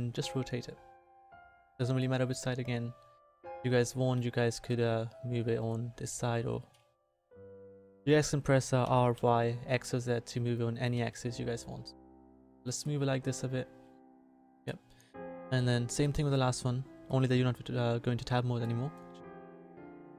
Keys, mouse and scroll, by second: 0.0 r, 2.8 click, 4.4 r, 6.1 r, 8.8 r, 10.7 r, 13.8 click, 14.6 a, 15.4 middle click.